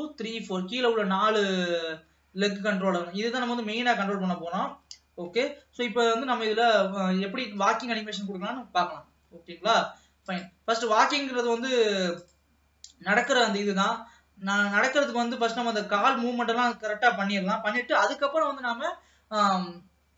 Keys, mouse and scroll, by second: 2.5-3.1 scroll down 2, 3.1-6.3 middle drag, 6.3 ctrl+s, 6.7-8.0 scroll down 1, 8.0 ctrl+s, 9.4-10.5 scroll up 1, 10.5 click, 12.4-15.0 drag, 15.0-20.1 middle drag.